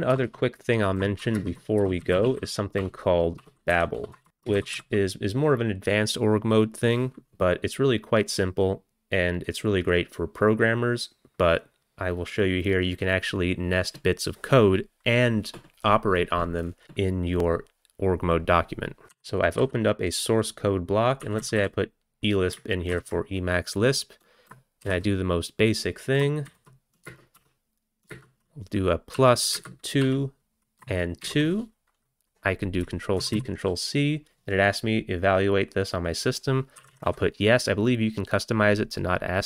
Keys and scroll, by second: 0.1 Return, 0.3 Return, 1.2-3.7 typing, 4.0 Return, 4.1 Return, 4.3 Return, 4.5 ctrl+x, 18.8-19.7 typing, 21.0-22.1 typing, 22.9 ctrl+n, 24.6-25.3 typing, 27.1 space, 28.2-31.3 typing, 33.2 ctrl+c, 33.4 ctrl+c, 36.6-37.6 typing.